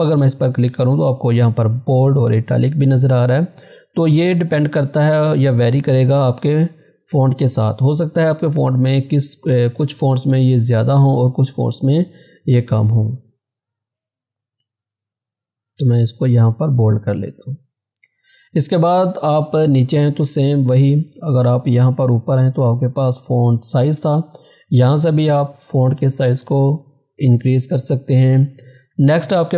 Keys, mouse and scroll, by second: 0.1 click, 6.4 click, 12.8 scroll down 1, 13.7 scroll up 1, 15.6 scroll down 1, 25.3 click, 28.1 click.